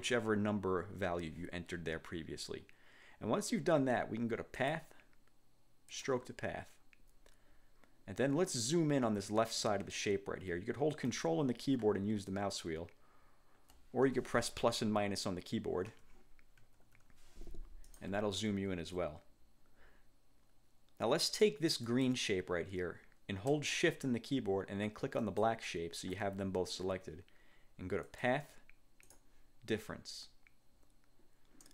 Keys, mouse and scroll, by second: 4.8 click, 6.0 click, 12.5 ctrl+scroll up 2, 13.0-13.5 ctrl+scroll up 4, 14.2 ctrl+1, 16.0 1, 17.0 -, 18.0 click, 18.7 ctrl+scroll up 2, 22.0 click, 25.3 shift+click, 28.2 click, 29.2 click.